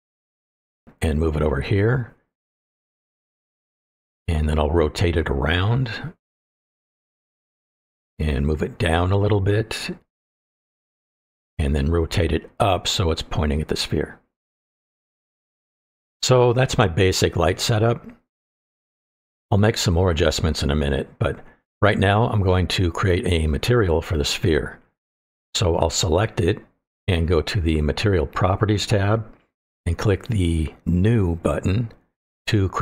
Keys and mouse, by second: 0.0-0.4 middle drag, 1.2 click, 1.9-2.5 middle drag, 2.6-3.1 middle drag, 3.6 click, 4.2 click, 4.8 middle click, 5.7 click, 6.2 click, 7.1 middle click, 8.4-10.1 ctrl+drag, 10.6 click, 10.7 middle click, 12.2-13.0 drag, 13.3 click, 14.3 middle click, 14.7 click, 15.5-16.8 middle drag, 17.4 click, 18.2-19.5 middle drag, 19.7-20.2 shift+middle drag, 26.2 click, 30.0 click, 31.5 click.